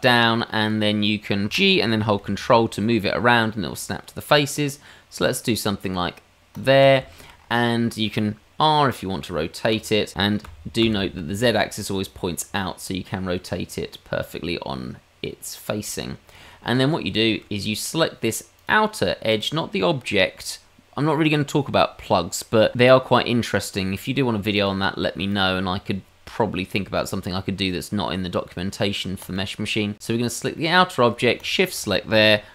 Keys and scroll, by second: 1.5 g, 9.7 r.